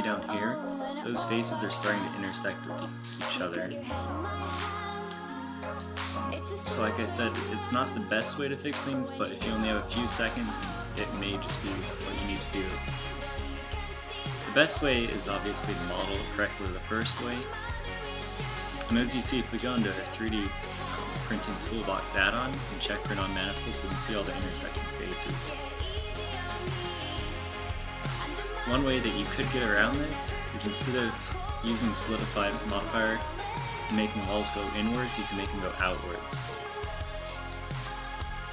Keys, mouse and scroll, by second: 9.1 z, 12.0 z, 14.2 z, 14.8 z, 16.6 Tab, 18.7 n, 19.6 t, 28.1 super+z, 28.5 super+z, 29.2 super+z, 29.8-33.3 typing, 36.2 a, 36.8 Tab.